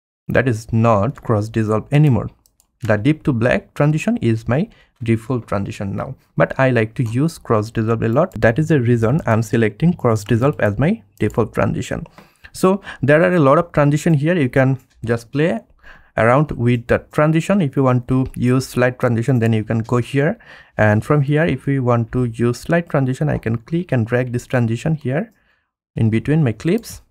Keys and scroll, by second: 1.2 space, 23.9 F1, 26.3 F1.